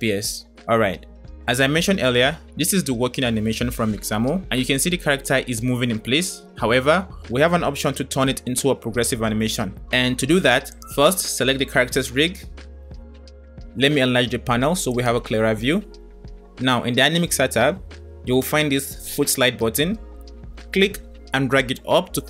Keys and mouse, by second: 0.0 space, 0.4 space, 1.7-2.5 middle drag, 3.5 middle click, 15.0-16.8 drag, 21.8-22.2 drag.